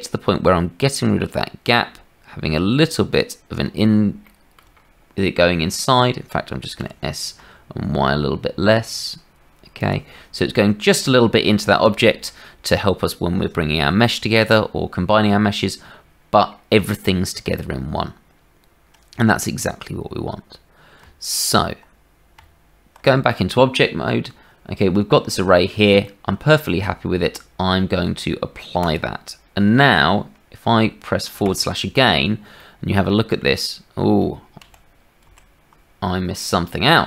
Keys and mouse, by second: 4.2 shift+click, 6.7 s, 11.9 shift+middle click, 21.0 Tab, 22.3 Tab, 23.5-24.7 middle drag, 26.1 middle click, 28.8 click, 31.4 KP_Divide, 32.6 click, 34.6 ctrl+z, 35.2 ctrl+z, 36.2 click, 36.6 middle click.